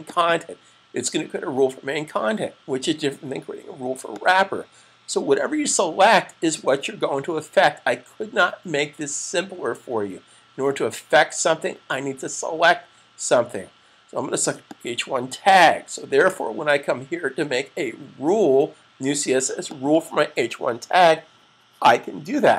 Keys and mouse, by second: 0.0 click, 4.3 click, 14.4 click, 19.5 click.